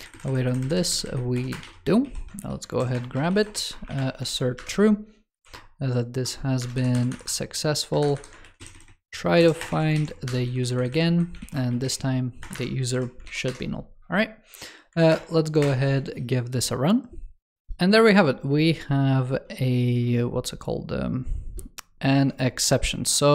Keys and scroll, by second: 1.9 ctrl+s, 2.2 super+c, 2.6 super+Right, 4.1 super+v, 8.3 super+c, 9.3 super+Right, 9.6 super+v, 9.9 super+s, 10.6 alt+Left, 11.3 ctrl+s, 13.1 super+s, 14.9 super+Return, 21.9 super+2.